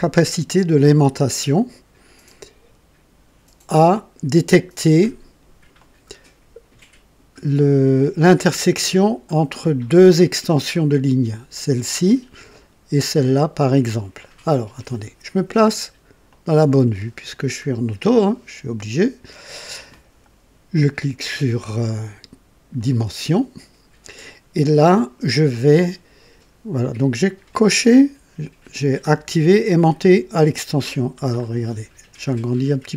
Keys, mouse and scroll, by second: 5.8 click, 16.3 click, 22.7 click, 31.4 scroll up 1, 32.4 scroll down 2.